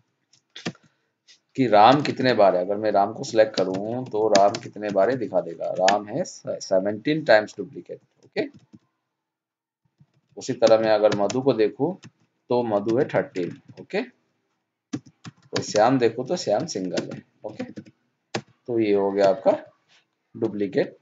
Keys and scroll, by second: 1.9 alt+Left, 2.0 alt+Down, 5.7 ctrl+shift+Down, 8.5 alt+Down, 12.8 ctrl+shift+Down, 13.4 alt+Left, 13.5 alt+Down, 17.4 alt+d.